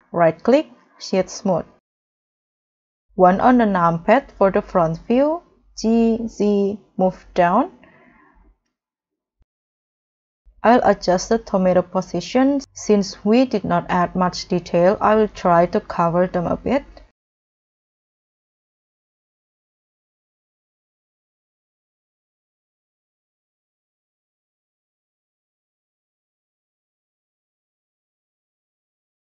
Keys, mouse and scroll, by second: 0.1 right click, 1.3 middle click, 2.8 1, 6.6 z, 9.5 scroll down 2, 9.8 middle click, 10.2-10.6 scroll down 2, 10.6 middle click, 11.1 middle click, 11.2-11.9 scroll up 5, 12.6-13.8 scroll down 2, 13.8 7, 14.7 scroll down 3, 15.1-15.4 scroll up 2, 17.3 shift+click, 17.5 shift+click, 17.5 shift+click, 17.5 shift+click, 17.7-20.5 typing, 18.4 middle click, 18.4 middle click, 21.6 r, 21.7 z, 23.3 g, 23.4 z, 24.6 scroll up 1, 24.7 g, 24.7 z, 25.1 shift+click, 25.6 shift+click, 25.8 scroll up 1, 25.9 middle click, 26.4 shift+click, 26.5 scroll down 1, 26.6 scroll up 3, 26.6 middle click, 26.8 middle click, 26.9-28.3 typing, 27.6 scroll down 2, 27.6 middle click.